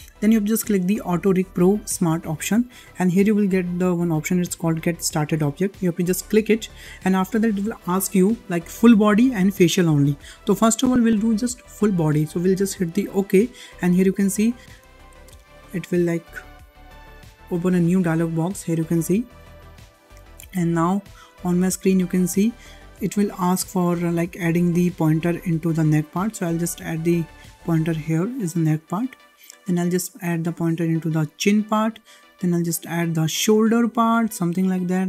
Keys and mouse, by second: 0.7 click, 6.2-14.9 drag, 21.7 shift+middle click, 25.4-28.7 drag, 29.7-31.3 drag, 32.1-34.1 drag, 34.6-35.0 shift+middle drag.